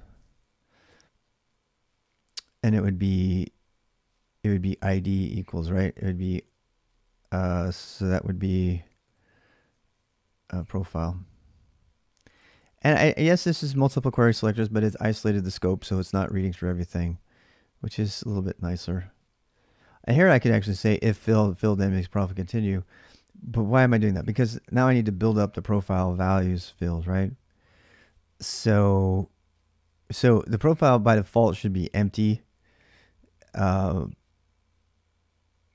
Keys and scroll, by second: 0.0-0.7 typing, 5.8-7.0 typing, 8.1 ', 8.8 Left, 9.7-14.6 typing, 13.6 ctrl+[, 16.2 ctrl+[, 16.3-16.9 typing, 16.8 Return, 19.9-21.4 h, 21.4-21.9 l, 22.9-23.8 typing, 30.0 k, 30.2 k.